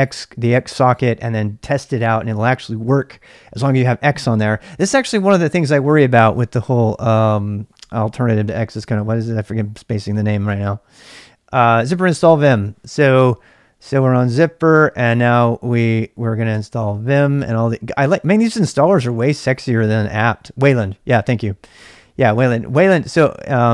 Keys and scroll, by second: 0.0-23.7 typing, 16.5 Return.